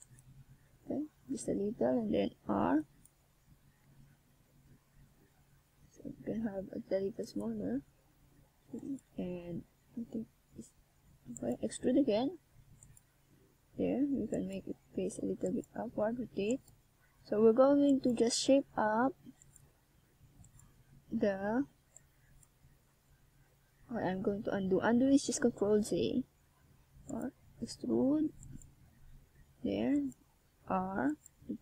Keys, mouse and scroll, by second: 0.0 right click, 0.6 right click, 8.2 click, 9.4 ctrl+s, 10.2 middle click, 15.0-15.5 scroll up 1, 15.5 middle click, 15.5 scroll up 1, 16.5 scroll up 1, 17.3 shift+scroll down 2, 19.2 middle click, 20.4 right click, 21.0 right click, 21.7 right click, 25.3 shift+click, 26.8 click, 29.4 KP_1, 30.2 click, 30.9 right click.